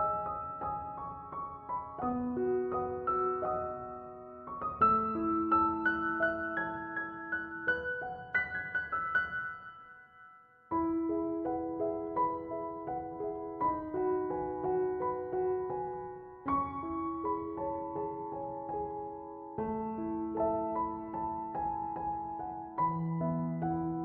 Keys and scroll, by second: 4.9 0, 5.1 Return, 13.1-14.3 typing, 22.5-23.9 typing.